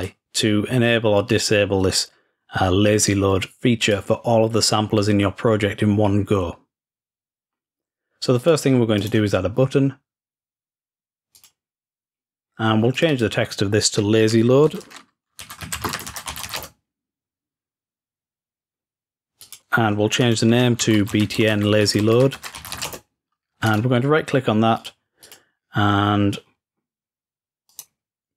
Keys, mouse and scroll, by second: 0.0 click, 3.9 click, 8.5 click, 9.1 middle click, 9.4 right click, 11.4 click, 13.0 click, 13.2 click, 19.5 click, 20.5 click, 23.7 right click, 24.8 click, 25.3 click, 27.8 right click.